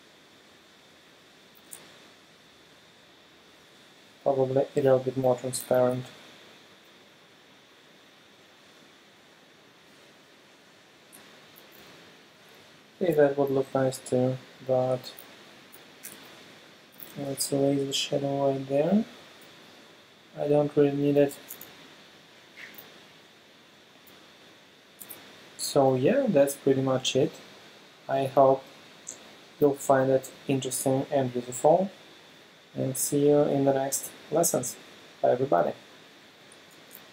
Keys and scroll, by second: 12.1 super+space, 16.1 e, 17.0 [, 21.2 v, 21.7 alt+super+space.